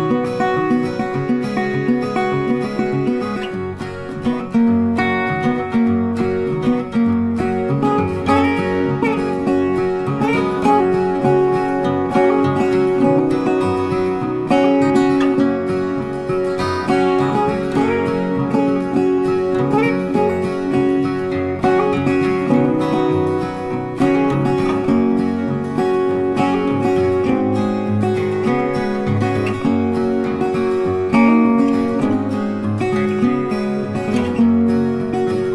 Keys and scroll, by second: 22.8 ctrl+t.